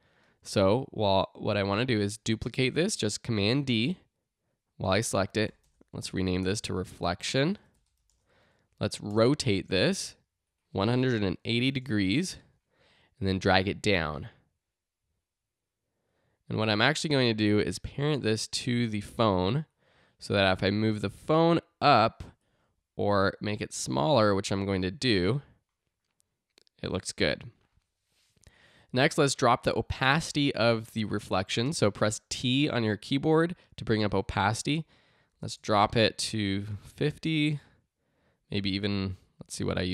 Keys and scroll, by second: 2.2 super+d, 5.6 Return, 6.1-7.9 typing, 8.1 Return, 9.1 r, 11.0-12.0 typing, 22.5 shift+s, 23.3 s, 29.8 t, 35.3 5, 35.6 Return.